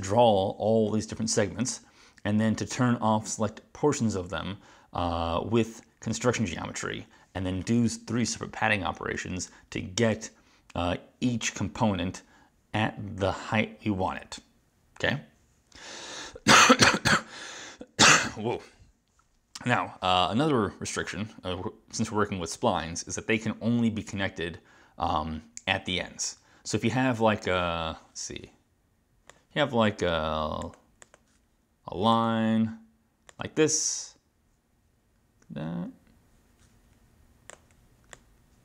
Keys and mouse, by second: 30.7 click, 31.0 click, 31.1 click, 32.2 click, 33.4 right click, 37.6 click, 38.2 click.